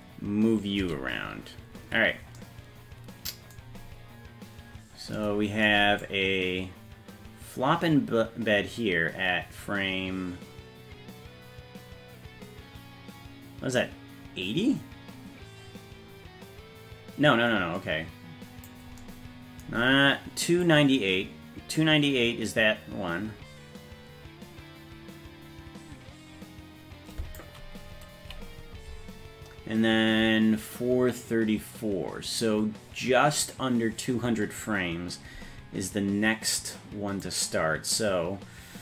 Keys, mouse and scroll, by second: 0.2-0.8 scroll down 1, 0.8 a, 6.0-18.4 drag, 18.4 click, 20.6-27.4 drag, 28.2 Left, 28.8 Left, 37.2-38.8 drag.